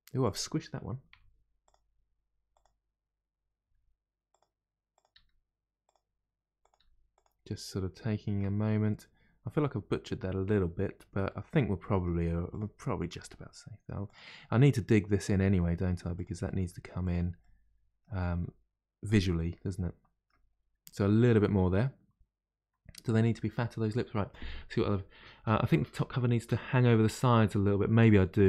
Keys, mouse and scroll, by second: 1.0 1, 1.6 click, 2.4 click, 3.6 g, 4.9 click, 5.1 g, 6.6 click, 6.7 g, 7.4-8.6 middle drag, 8.6-8.9 scroll down 2, 8.9-12.4 middle drag, 12.4 click, 12.8 middle click, 13.2 g, 14.3 middle click, 15.2 click, 15.4 g, 16.4 middle click, 17.0 click, 17.4 middle click, 18.2 g, 19.3-20.5 middle drag, 20.5-20.9 scroll down 1, 20.9-24.0 middle drag.